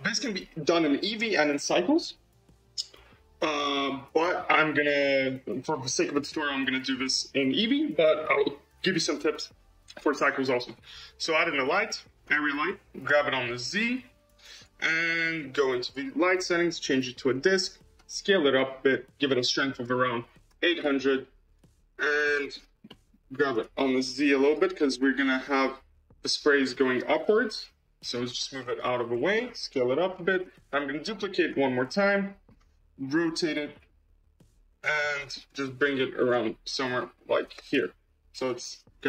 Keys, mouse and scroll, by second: 13.0 g, 15.7-17.9 drag, 17.9 s, 19.6-20.7 drag, 20.7 0, 21.8 scroll, 22.1-22.5 middle drag, 22.8 middle click, 23.4 g, 25.3-26.4 drag, 26.4 g, 29.2 s, 30.6 shift+d, 31.6-33.1 middle drag, 33.1 r, 35.0-35.4 middle drag, 35.4 g, 36.4-37.4 middle drag, 37.4 r.